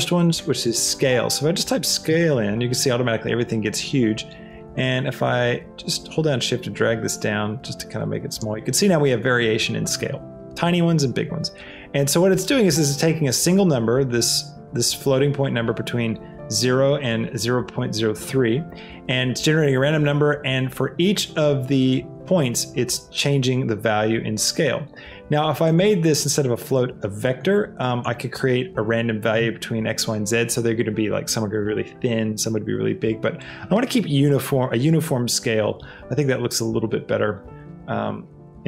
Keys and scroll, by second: 0.4 a, 0.8 e, 2.3 Return.